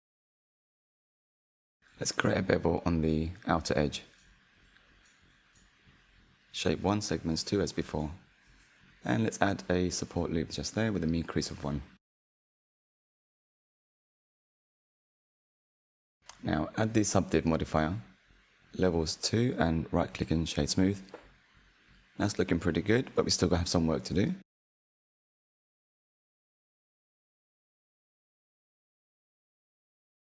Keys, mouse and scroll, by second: 0.1 alt+click, 1.1 ctrl+b, 8.2 ctrl+r, 10.4-13.5 drag, 14.0 Tab, 14.5-15.5 scroll down 2, 15.5-19.3 drag, 19.6-21.0 right drag, 21.0 click, 22.0-25.1 middle drag, 28.3 click, 28.5 Tab, 28.8 middle click, 29.5-30.2 scroll up 1.